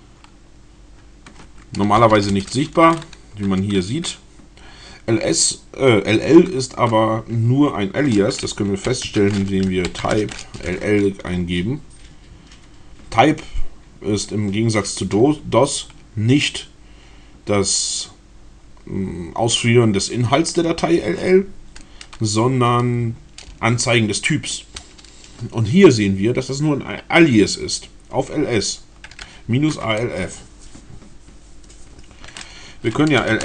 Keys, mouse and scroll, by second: 1.8-2.6 typing, 8.6-10.7 typing, 24.7 Return, 32.7-33.4 typing.